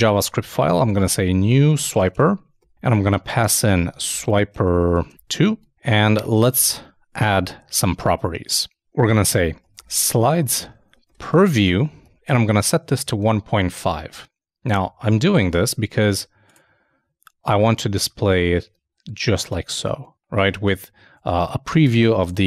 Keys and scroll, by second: 0.9-1.9 typing, 3.4 shift+3, 10.0-12.5 typing, 15.5 super+Tab.